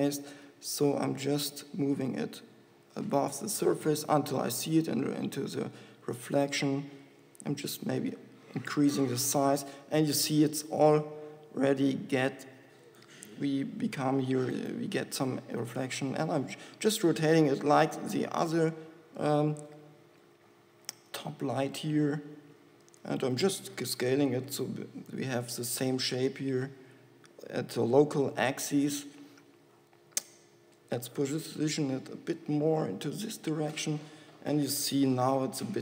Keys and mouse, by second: 0.8 g, 2.0-4.4 drag, 2.0 g, 3.3 g, 4.7 g, 6.7 g, 8.0 s, 8.4 click, 10.9 g, 14.8 r, 18.3 r, 20.5 middle click, 21.8 g, 22.8 r, 23.8 s, 30.7 g, 33.2 g.